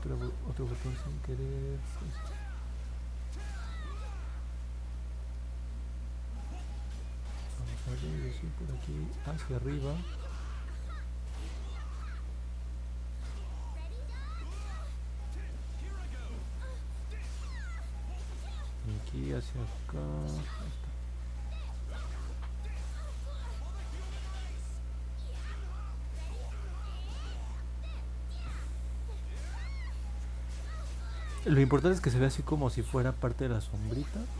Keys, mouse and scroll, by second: 1.0 click, 1.6 click, 2.2 click, 2.7 click, 3.2 click, 3.7 click, 4.3 click, 4.8 click, 5.3 click, 6.7 click, 7.2 click, 7.8 click, 9.3 click, 9.9 click, 10.1 click, 10.7 click, 11.0 click, 11.3 click, 11.6 click, 11.9 click, 12.5 click, 12.8 click, 13.4 click, 16.0 click, 17.4 click, 19.3 click, 19.9 click, 20.4 click, 23.7 click, 24.4 click, 25.3 click, 25.8 click, 26.8 click, 27.3 click, 27.9 click, 28.2 click, 31.3 click, 33.0 click, 33.3 click, 33.6 click, 33.9 click, 34.2 click.